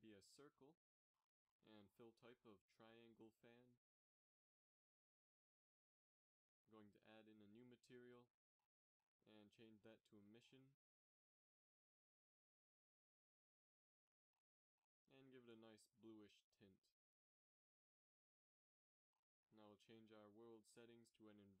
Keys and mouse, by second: 2.9 g, 4.2-4.9 middle drag, 4.9 g, 6.6-12.3 drag, 13.4-15.1 drag, 19.7-21.6 drag.